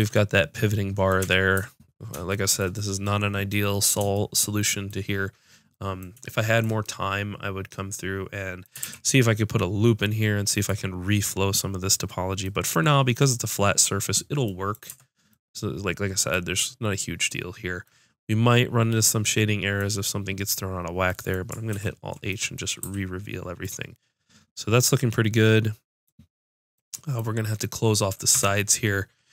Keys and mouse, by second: 1.2 Tab, 8.8 ctrl+r, 14.9 Tab, 21.7 alt+h, 22.8 a, 28.3 Tab.